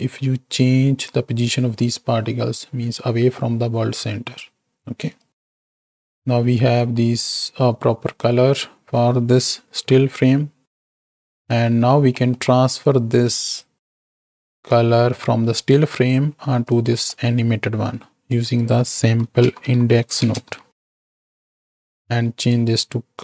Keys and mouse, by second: 5.2-5.6 right drag, 6.1 click, 6.1 right click, 9.7 KP_7, 11.1 click, 11.5 x, 12.2 click, 12.2 right click, 13.0-13.6 drag, 14.7-15.8 drag, 17.0 click, 17.0 right click, 18.5-21.4 drag, 22.3-23.2 drag.